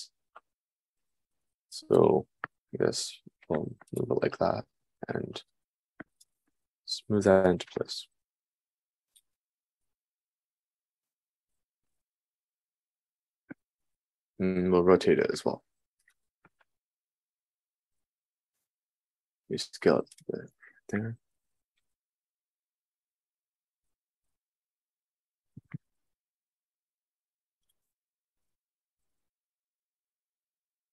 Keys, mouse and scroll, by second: 1.9 g, 6.8 g, 14.3 r, 17.2 r, 19.6 s, 22.3 g, 25.3-30.9 drag, 25.3 g, 28.4 g.